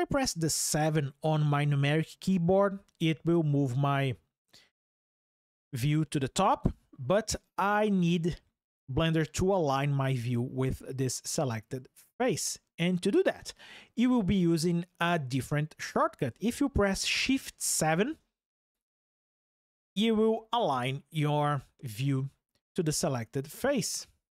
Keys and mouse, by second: 0.6 KP_7, 12.0 click, 17.5 shift+KP_7.